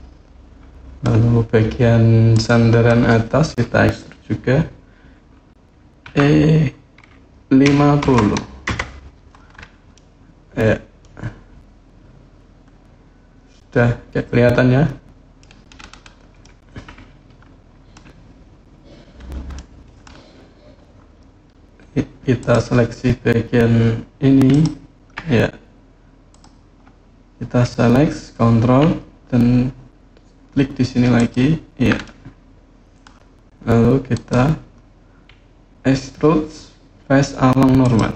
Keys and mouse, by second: 0.3 click, 2.1 click, 5.8 e, 7.4 KP_5, 7.8 KP_0, 8.4 KP_Enter, 9.7-11.1 drag, 11.1-15.2 middle drag, 16.2-17.7 middle drag, 19.4 middle click, 22.2 click, 26.1 click, 31.0 ctrl+click, 31.9 middle click, 34.0-37.8 drag.